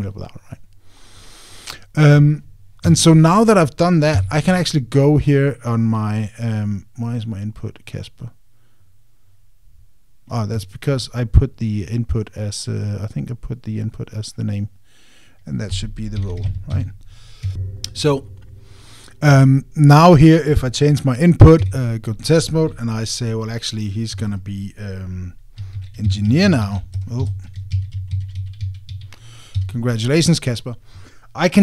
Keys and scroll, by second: 11.3 Escape, 17.5 Tab, 28.2 alt+BackSpace, 30.3 Tab.